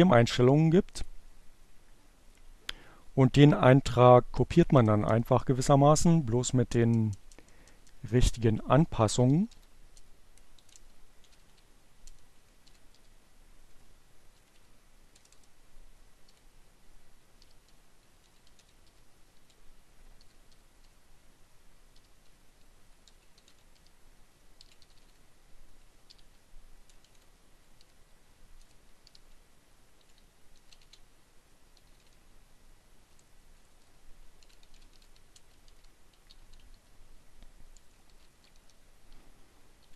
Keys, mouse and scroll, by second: 0.0 click, 1.0 Return, 1.6 space, 3.9 Return, 5.2 Up, 5.4-12.3 typing, 13.5 p, 13.8 BackSpace, 14.1 p, 16.1-20.1 typing, 21.4-24.6 typing, 26.9 BackSpace, 28.9-32.4 typing, 33.5-38.2 typing, 39.3 shift+9, 39.9 shift+Return.